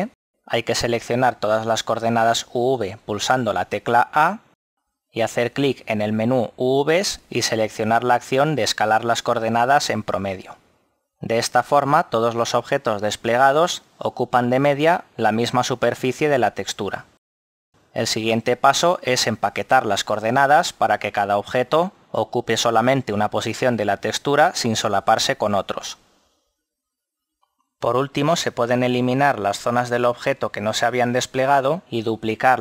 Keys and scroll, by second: 4.0 a, 27.9 Escape, 28.7 Delete.